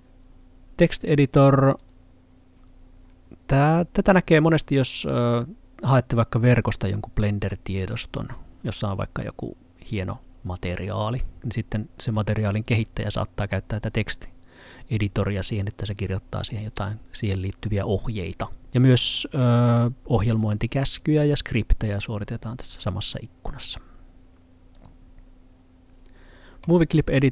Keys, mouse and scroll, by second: 12.5 click, 24.8 click.